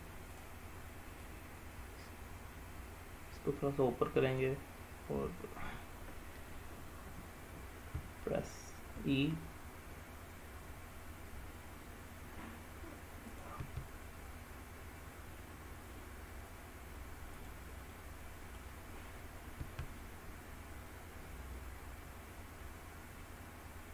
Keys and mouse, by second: 0.4 click, 1.4-4.5 drag, 13.4 click, 13.7 e, 17.5 click, 18.0 middle click, 19.7 e.